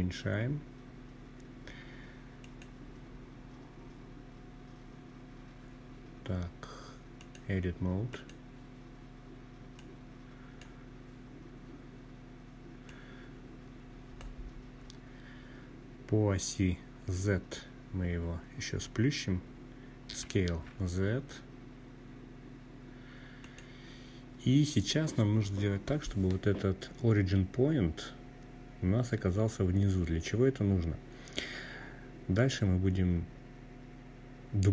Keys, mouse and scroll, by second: 1.1 click, 6.0-7.1 drag, 8.4 click, 9.7-11.5 scroll up 3, 11.6-13.0 drag, 13.3-13.8 scroll up 2, 18.8 s, 19.2 z, 22.1 click.